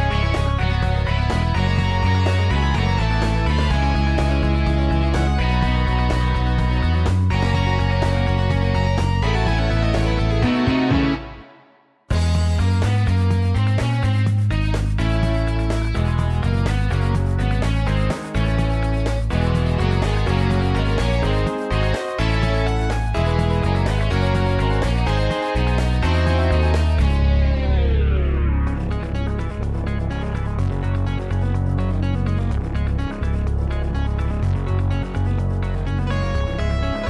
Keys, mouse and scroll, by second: 1.8 0, 2.0 Return, 3.8 typing, 7.1 F9, 12.3-12.8 typing, 21.9 F12, 25.5 typing, 29.4 typing, 31.5 typing, 33.2 Delete, 33.3 typing, 35.9 Delete, 36.9 Return.